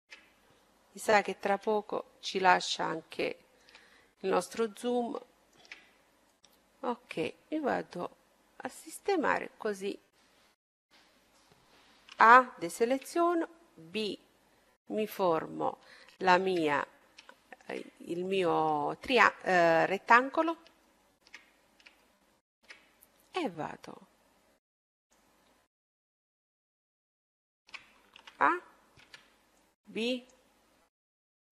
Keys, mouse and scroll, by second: 1.4 KP_7, 2.7 middle click, 5.7-6.8 middle drag, 6.3-7.9 drag, 9.4-12.7 middle drag, 12.1 a, 13.0 b, 16.0-20.5 middle drag, 20.6-24.0 middle drag, 23.4-25.1 drag, 27.2-28.9 middle drag, 28.2 a, 29.0 b, 30.7-31.5 middle drag.